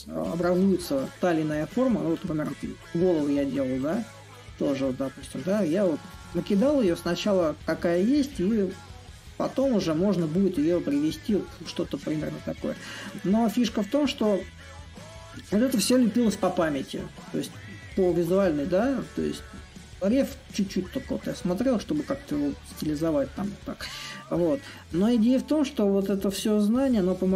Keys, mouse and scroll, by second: 0.8-5.8 drag, 8.3-18.4 middle drag, 20.7-25.7 drag, 26.8-27.3 drag.